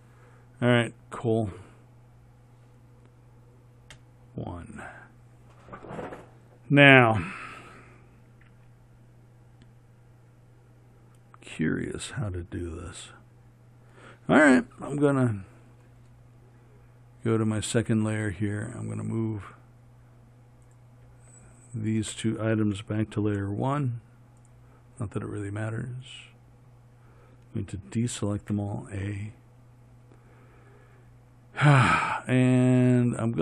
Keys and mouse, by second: 4.2 KP_1, 23.6 m, 28.7 a.